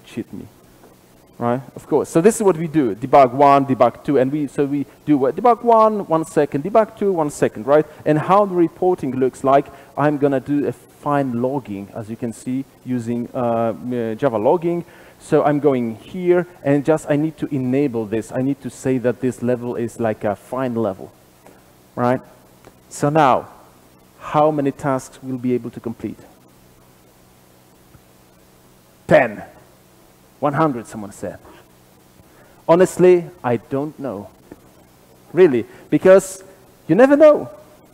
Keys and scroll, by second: 0.3 super+/, 9.2 super+b, 14.8 ctrl+b, 19.5 super+/.